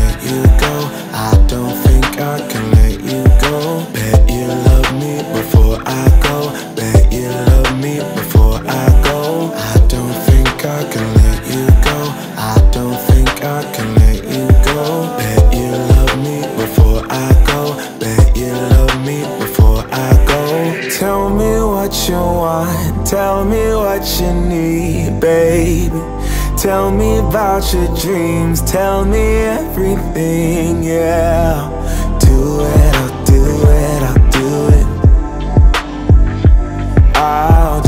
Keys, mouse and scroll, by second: 0.3 click, 2.0 shift+Page_Down, 3.8-5.4 drag, 6.2 Return, 6.2 0, 7.1 shift+Page_Down, 7.8 shift+Page_Down, 9.9-11.7 drag, 11.7 shift+Page_Down, 13.1 click, 13.7-14.7 typing, 15.3 shift+Page_Down, 16.8 click, 18.6-19.4 typing, 20.6-21.8 typing, 20.8 shift+Page_Down, 22.0 click, 23.9 typing, 25.2 shift+Page_Down, 26.5 click, 27.7-28.5 typing, 29.4 shift+Page_Down, 30.2 click, 31.0-31.9 typing, 32.8 click, 33.2 Page_Down, 34.1 click, 35.2-36.8 typing, 37.0-37.8 drag.